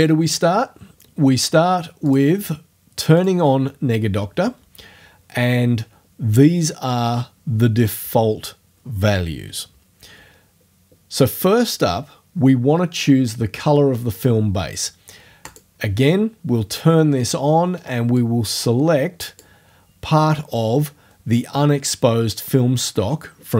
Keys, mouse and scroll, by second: 2.1 click, 3.2 click, 15.5 click, 18.2-19.6 drag.